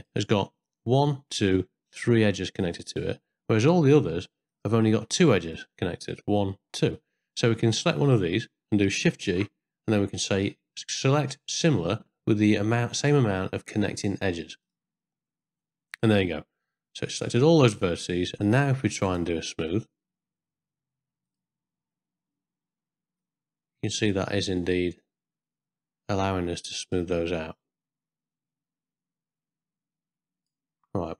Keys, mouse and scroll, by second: 3.8 click, 4.5 click, 5.4 click, 9.3 shift+g, 15.6-18.2 middle drag, 19.1-21.4 right drag, 23.2-30.5 drag.